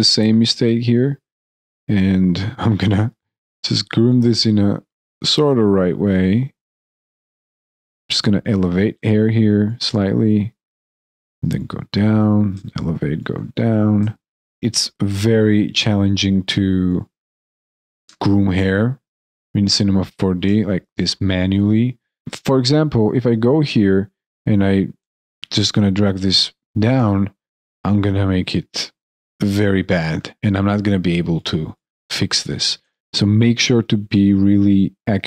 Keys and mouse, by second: 0.7 alt+click, 1.2 alt+right click, 1.3 alt+click, 2.5 alt+right click, 4.0 alt+right click, 4.1 alt+click, 4.9 alt+click, 5.0 alt+right click, 5.2 alt+click, 5.6 alt+right click, 5.8 alt+click, 6.1 alt+middle click, 6.3 alt+right click, 6.4 alt+click, 6.9 alt+middle click, 7.0 alt+right click, 7.3 alt+middle click, 7.8 alt+click, 8.8 alt+click, 12.4 alt+click, 12.6 alt+click, 13.8 alt+click, 17.9 alt+click, 20.4 alt+click, 22.7 alt+right click, 23.2 alt+click, 23.5 alt+middle click, 24.9 alt+middle click, 25.0 alt+click, 26.8 alt+click, 32.7 alt+click, 32.8 ctrl+z.